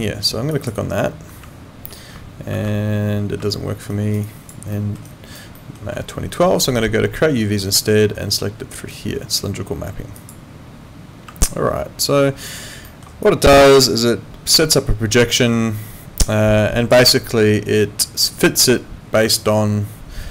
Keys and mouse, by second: 2.7 ctrl+4, 3.5 alt+middle click, 3.9 alt+right click, 4.3 alt+click, 4.7 alt+middle click, 5.0 alt+right click, 5.6 alt+middle click, 7.6 click, 10.2 click, 11.5 alt+right click, 12.8 alt+middle click, 13.2 alt+click, 19.4 alt+click.